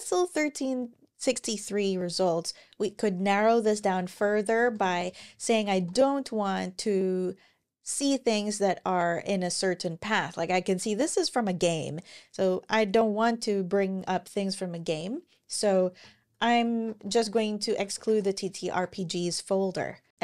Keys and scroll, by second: 3.4-6.0 typing, 15.6-18.9 typing.